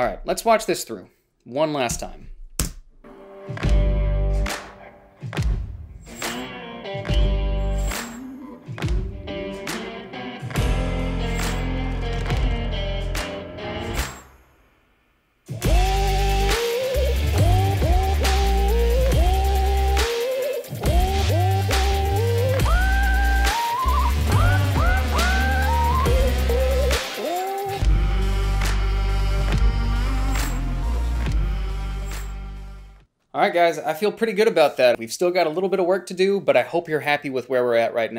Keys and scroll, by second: 2.2 Home, 2.9 space.